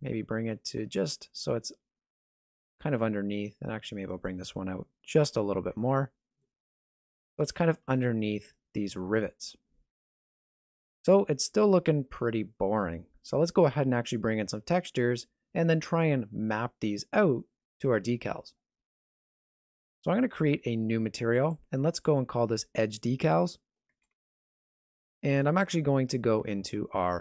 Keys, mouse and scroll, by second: 3.0 middle click, 4.1 alt+right click, 5.1 g, 7.0 alt+a, 7.5-7.9 scroll down 1, 8.2 middle click, 8.2 scroll down 1, 8.9 middle click, 9.3 Tab, 9.6 shift+middle click, 10.1 alt+a, 19.5 right click, 21.3 click, 22.1 click.